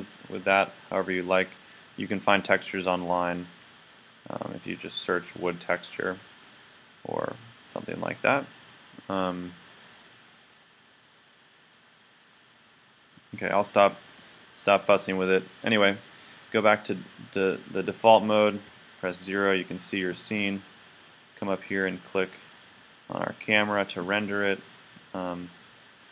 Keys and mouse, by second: 8.7 g, 16.9 click, 18.7 KP_0, 22.2-26.1 drag.